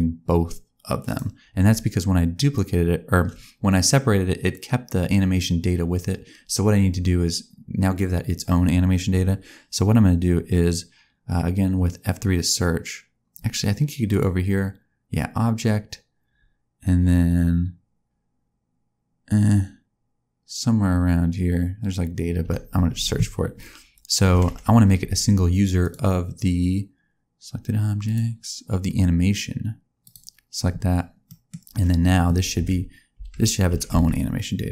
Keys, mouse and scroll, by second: 2.5 click, 14.0 click, 22.4 F3, 30.0 click, 31.2 middle click, 32.5 a, 33.1 a, 33.6 g.